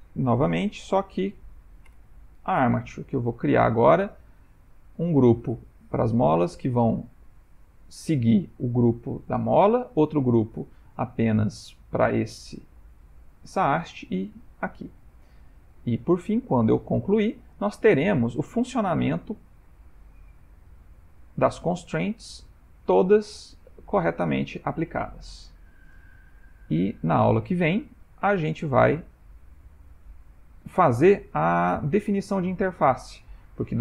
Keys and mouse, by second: 0.5 ctrl+p, 3.4 click, 4.0 shift+middle click, 4.4 middle click, 6.3 middle click, 6.4 middle click, 6.6 shift+middle click, 10.1 middle click, 10.9 middle click, 11.0 middle click, 14.5-15.9 ctrl+middle click, 15.2-15.8 middle click, 16.1-16.5 shift+middle click, 16.9 ctrl+middle click, 17.7 click, 18.4 middle click, 20.9 g, 23.9 click, 24.3 r, 25.7 click, 26.1 r, 27.7 ctrl+middle click, 28.2 shift+middle click, 28.7 middle click, 30.3 click, 30.8 r, 32.5 middle click.